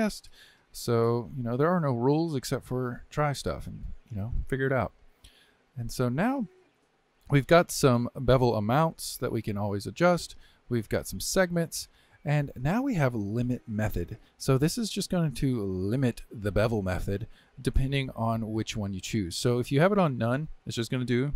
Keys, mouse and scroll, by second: 1.2 click, 4.9-5.8 middle drag, 5.8 scroll up 1, 6.0-8.4 shift+middle drag, 8.4-11.4 drag, 15.9-19.0 drag.